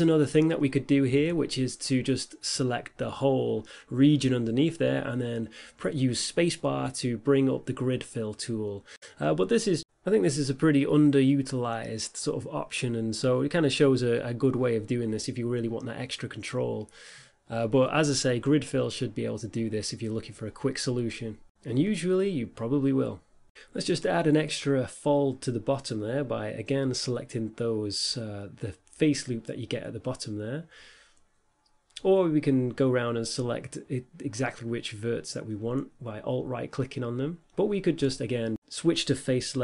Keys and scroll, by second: 3.3 e, 5.0 e, 14.4 a, 14.6 a, 15.2 Tab, 18.8 a, 19.3 Tab.